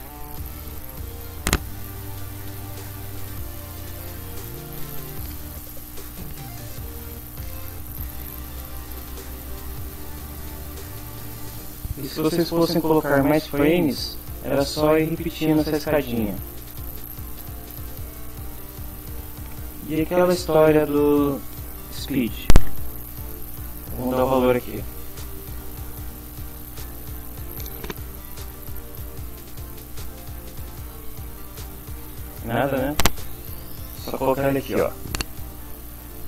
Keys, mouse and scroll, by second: 0.0-0.6 typing, 9.2-12.2 drag, 17.6-18.8 drag, 21.4 click, 23.1 BackSpace, 23.9 2, 28.9 2, 29.7 Down, 31.6 Down, 32.5 Left.